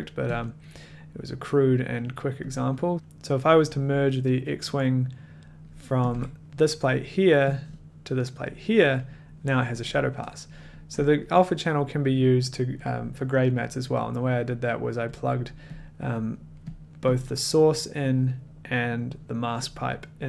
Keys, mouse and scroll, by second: 0.3 click, 0.7 middle click, 1.9 click, 2.5 click, 6.1 1, 6.4-7.0 drag, 7.6-8.4 drag, 11.1 click, 14.2 click, 14.3 click, 14.3 click, 14.5 click, 15.2 click, 15.2 scroll, 15.7 click, 16.2 click, 16.8 click, 16.8 middle click, 17.1 click, 17.9 click, 18.2 middle click.